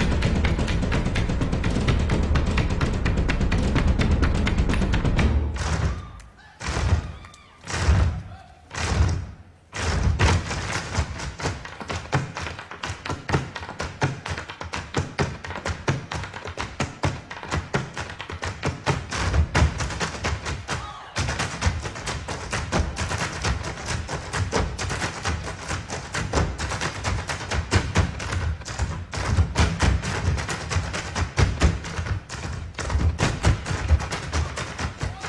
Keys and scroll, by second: 3.4 super+j, 9.0 super+j, 22.6 super+j.